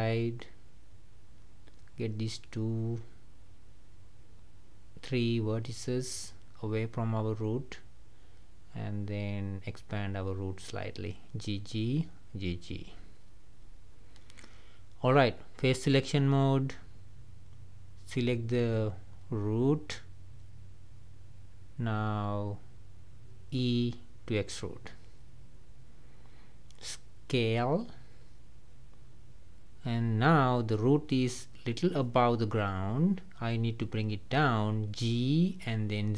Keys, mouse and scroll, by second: 1.7 click, 3.1 ctrl+click, 4.6 ctrl+click, 6.7 g, 8.9 click, 9.6 g, 11.7 click, 12.1 g, 13.7-16.3 middle drag, 16.3 click, 17.2 click, 17.9-19.1 middle drag, 19.1 shift+click, 19.6 shift+click, 20.1 shift+click, 20.4 shift+click, 20.8 shift+click, 21.3 shift+click, 21.7-23.1 middle drag, 23.1 scroll down 1, 23.6-25.2 middle drag, 25.2 e, 26.7 middle click, 27.2 scroll down 2, 28.3 s, 29.5-32.6 middle drag, 35.7 g.